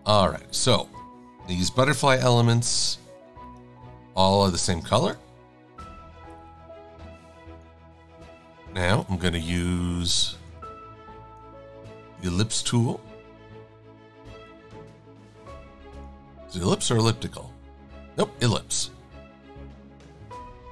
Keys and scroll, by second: 4.9 shift+super+a, 10.3 e, 11.7 a.